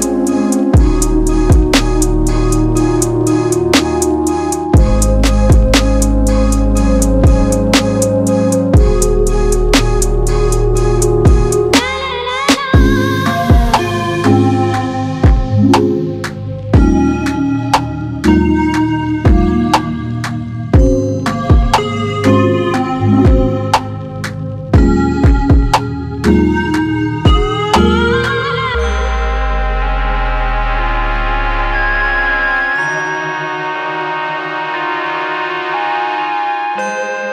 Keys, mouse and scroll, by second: 1.3-6.0 right drag, 2.4-3.0 scroll down 1, 6.0 click, 8.0 click, 8.7 Delete, 14.8-15.5 drag, 18.2-19.5 drag, 20.5 click, 24.6 z, 25.4-25.8 scroll down 1, 28.7-30.4 middle drag, 28.7 a, 30.4-35.7 drag, 32.3-34.3 scroll up 1.